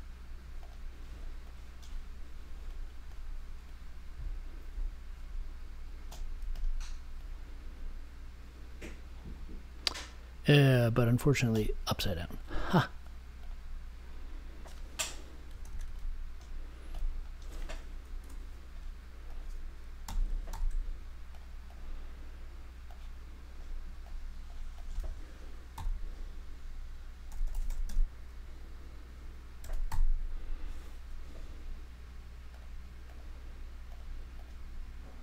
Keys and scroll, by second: 15.6 super+x, 18.2 BackSpace, 20.0 m, 20.5 super+v, 25.7 n, 27.0-28.3 typing, 29.5 r.